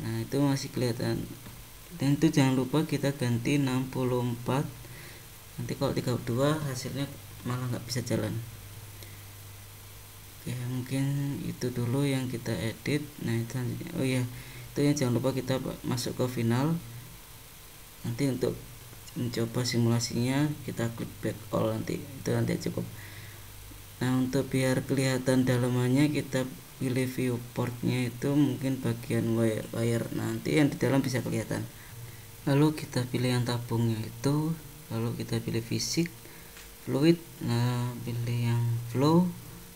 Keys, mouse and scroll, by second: 2.1 click, 6.2-8.6 scroll down 17, 9.4-12.4 scroll down 2, 12.4 click, 16.8-17.6 scroll up 2, 17.6-18.4 scroll up 2, 18.4-19.1 scroll down 3, 19.1-19.9 scroll down 2, 19.9-20.8 scroll down 1, 20.8 scroll down 1, 21.0-23.0 scroll up 1, 23.3 click, 25.3 click, 25.9-27.1 scroll down 12, 27.1 click, 32.1 click, 35.6 click, 36.5 click, 37.5 click, 39.6-39.7 scroll down 6.